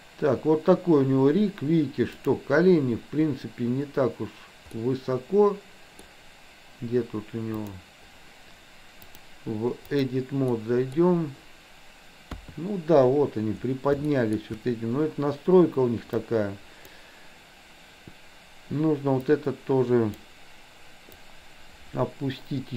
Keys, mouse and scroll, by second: 2.2 click, 4.7-6.1 middle drag, 7.7 drag, 9.1-10.2 drag, 10.6 middle click, 12.2 KP_3, 14.1 shift+middle click, 16.2 click, 19.3-20.3 drag, 21.3-22.7 drag.